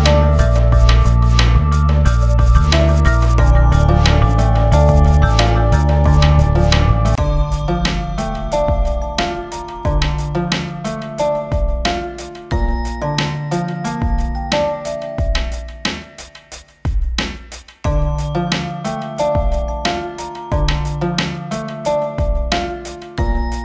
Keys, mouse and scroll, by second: 0.9-4.3 scroll down 1, 4.3-7.3 drag, 8.6-12.8 drag, 12.8 space, 13.7 F8, 14.0 click, 14.3 space, 16.1 ctrl+space, 16.9-18.1 drag, 19.3 click, 21.4 scroll down 1, 22.3-23.6 drag.